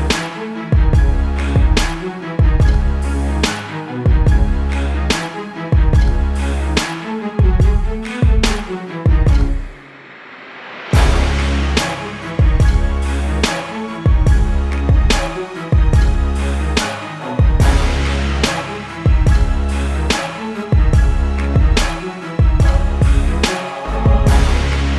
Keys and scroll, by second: 1.4 p.